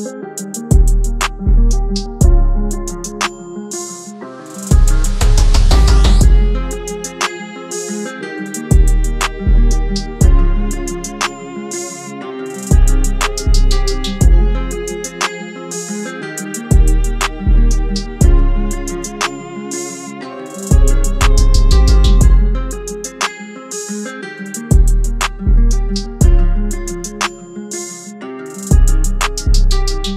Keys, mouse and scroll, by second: 10.0 double click, 20.9 [, 21.0 [.